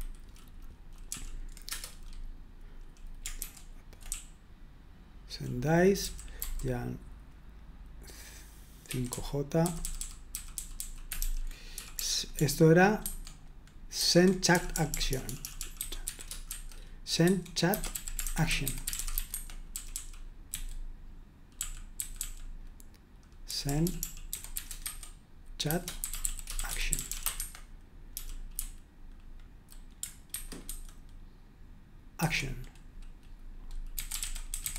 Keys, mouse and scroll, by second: 1.1 super+l, 1.7 Return, 3.4 ctrl+u, 4.1-6.9 typing, 8.6-29.6 typing, 14.0 super+1, 27.4 Escape, 30.3 super+1, 30.7 super+2, 32.3 super+1, 33.9-34.7 typing.